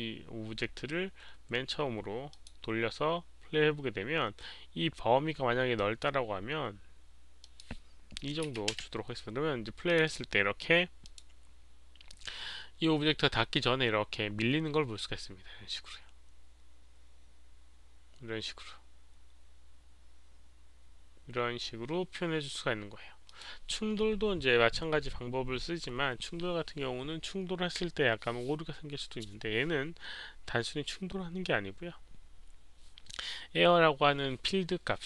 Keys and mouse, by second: 2.2 click, 5.7 click, 7.4 click, 8.4 click, 8.4 KP_2, 8.7 Return, 8.7 click, 8.7 KP_2, 9.5 Return, 9.5 KP_2, 9.8 click, 10.0 click, 11.0 click, 18.2 click, 18.6 Return, 18.6 KP_2, 19.2 Return, 19.2 click, 19.4 click, 23.3 click.